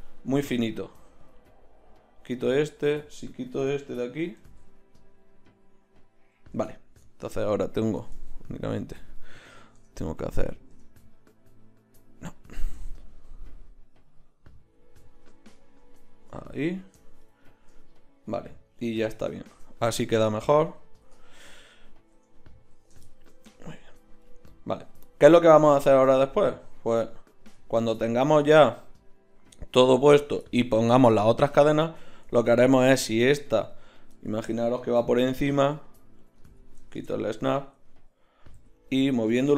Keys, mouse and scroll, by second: 0.4 x, 2.9 right click, 3.7 l, 4.4 g, 22.1 Tab, 26.2 z, 26.8 click, 27.4 z, 27.9 Tab, 35.4 g, 36.9 shift+Tab, 38.6 g.